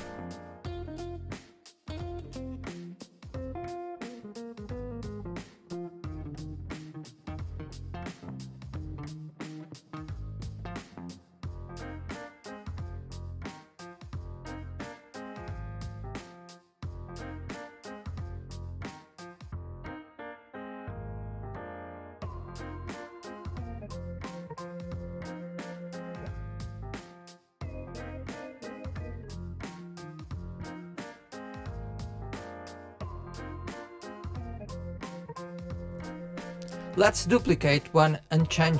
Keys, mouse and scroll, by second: 2.9-3.7 middle drag, 4.6 KP_3, 5.4 click, 6.0 middle click, 6.3 click, 6.8 KP_3, 7.5 g, 9.4 click, 10.5 space, 11.5 ctrl+a, 12.9 space, 14.5 click, 14.9 shift+d, 16.5 click, 17.4 click, 18.8 click, 20.4 click, 23.4 click, 23.7 click, 24.6 click, 24.9-25.7 middle drag, 26.7 click, 28.2 click, 28.8 click, 29.1-31.3 middle drag, 31.3-32.0 scroll down 3, 31.6 middle click, 32.1 middle click, 32.2-32.6 scroll up 2, 32.6-34.1 middle drag, 34.7 KP_1, 35.1 scroll down 1, 35.4-37.4 shift+middle drag, 37.4 click, 38.6 shift+d.